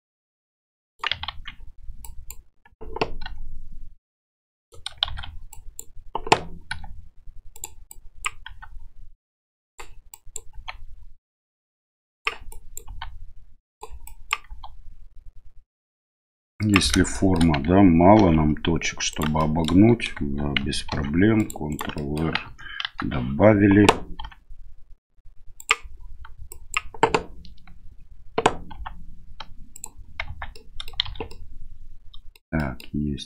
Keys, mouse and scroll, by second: 1.3 ctrl+z, 2.1 click, 3.2 g, 5.1 shift+z, 5.5 click, 6.7 g, 8.0 click, 8.4 g, 10.2 click, 10.5 g, 12.5 click, 12.9 g, 14.0 drag, 14.5 g, 17.2 shift+middle click, 18.2 ctrl+r, 19.5 middle drag, 20.9 ctrl+r, 22.0 middle click, 22.4 KP_1, 22.8 KP_3, 24.2 g, 26.5 click, 28.7 g, 30.3 Tab, 30.5-30.9 middle drag, 31.0 shift+z, 31.3-32.3 middle drag, 32.6 middle drag.